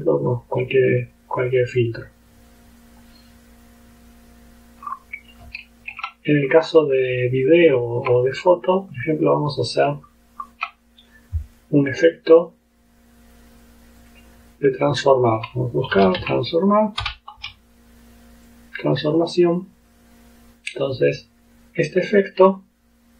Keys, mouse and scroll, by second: 1.1 click, 1.5 click, 4.9-5.2 scroll up 2, 5.7 ctrl+scroll down 2, 6.5-6.9 ctrl+scroll up 3, 7.0-7.5 scroll down 2, 7.8 ctrl+scroll down 2, 8.9 click, 9.6 click, 10.1-10.7 ctrl+scroll up 4, 11.5 click, 15.1 click, 15.7-17.5 typing, 18.5 click, 19.8 click, 21.1 click.